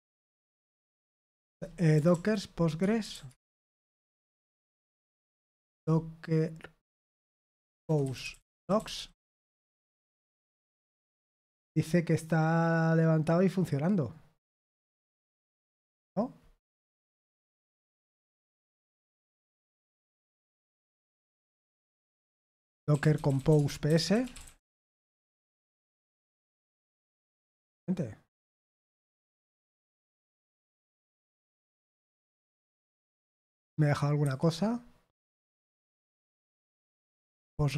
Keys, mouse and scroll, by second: 0.0-9.4 typing, 4.2 Return, 16.8-18.7 scroll up 2, 21.0-22.0 scroll up 2, 22.6-25.2 typing, 28.5 super+h, 29.8 ctrl+p, 34.2 super+8, 37.4 super+7.